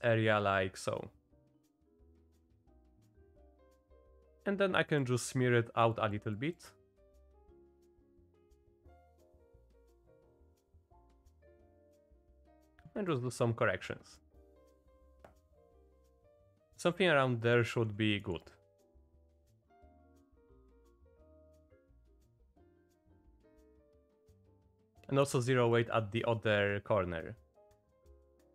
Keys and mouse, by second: 2.7 click, 3.7 ctrl+z, 4.9 click, 5.9 click, 6.3 click, 6.7 click, 7.0 click, 7.3 click, 8.1 ctrl+z, 8.5 click, 8.9 click, 9.3 click, 9.6 click, 10.7 click, 11.4-13.4 drag, 14.3 click, 15.1 click, 17.6 click, 18.1 click, 18.5 click, 18.9 z, 19.4 click, 19.9 click, 20.2 click, 21.0-22.1 drag, 22.3 click, 22.4 click, 22.6 click, 23.1 click, 23.3 middle click, 23.4 middle click, 23.6 middle click, 24.2 middle click, 24.4 middle click, 24.6 middle click, 24.7 click, 25.1 shift+click, 25.7-27.6 drag, 27.8 click.